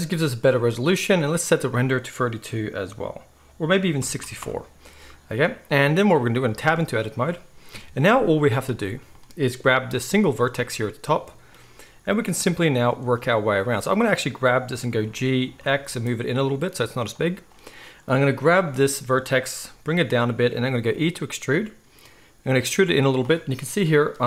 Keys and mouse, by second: 6.5 Tab, 7.7 KP_1, 8.2 z, 10.2-13.1 shift+middle drag, 13.1-17.2 drag, 15.1 g, 17.2-17.6 middle drag, 17.6-20.8 drag, 19.6 g, 20.8-24.2 middle drag, 20.8 e.